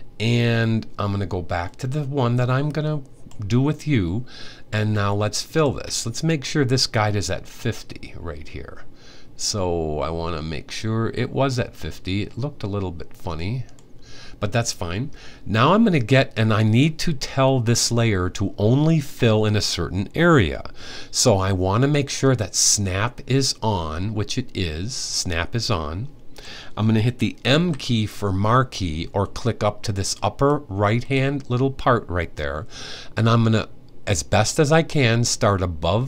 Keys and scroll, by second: 27.3 m.